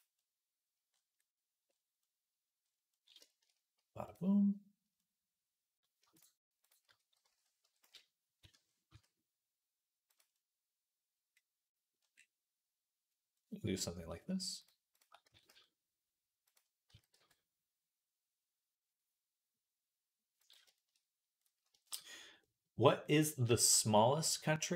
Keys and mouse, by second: 1.0-2.8 middle drag, 2.8-10.9 shift+middle drag, 8.7 s, 11.6-14.2 middle drag, 14.4 shift+click, 14.8 shift+click, 15.1 s, 16.7 s, 21.2-22.9 middle drag, 23.3 shift+middle click, 24.0 click, 24.1 middle click.